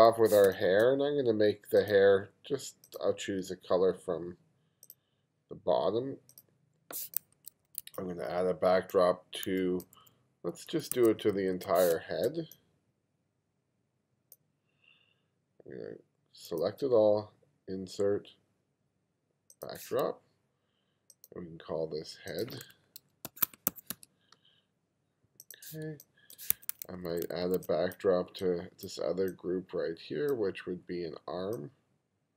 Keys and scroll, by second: 0.5 space, 7.4 1, 9.9 2, 11.0 1, 11.9 space, 23.0-24.4 typing, 26.0 space, 26.9 2.